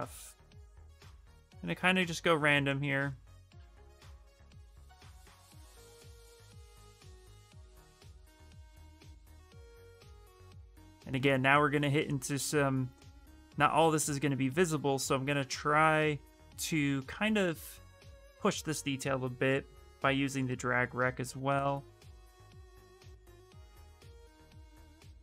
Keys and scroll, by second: 22.8 space, 24.3 space.